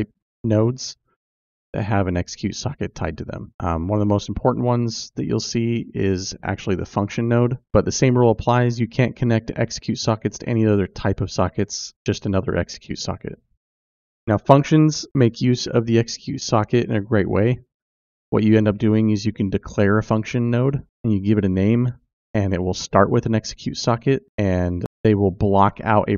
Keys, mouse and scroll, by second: 11.7 click.